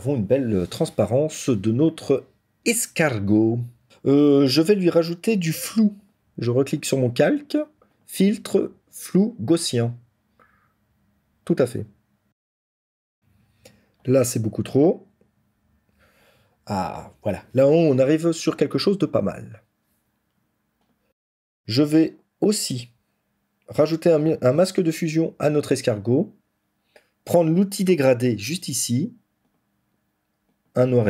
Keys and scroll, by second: 21.1 ctrl+-.